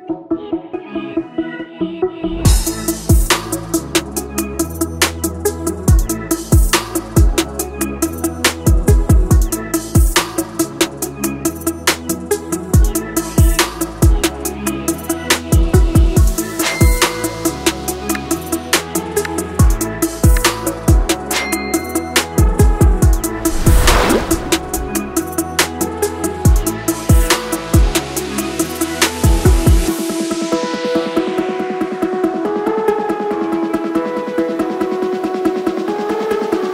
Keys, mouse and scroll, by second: 4.1 click, 4.1 click, 8.2-13.1 drag, 13.2 click, 15.7 click, 17.1-21.0 drag, 21.0-22.9 scroll down 1, 23.3 scroll, 26.4-35.5 drag, 35.5 Return, 36.4 click.